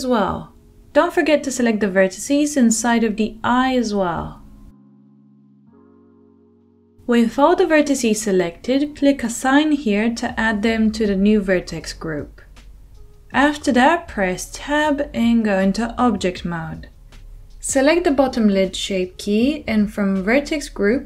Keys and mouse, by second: 4.2-6.1 shift+middle drag, 6.1 shift+click, 6.2-9.9 middle drag, 9.9-14.5 drag, 13.4 Tab, 14.5-16.9 middle drag, 16.9-21.0 drag.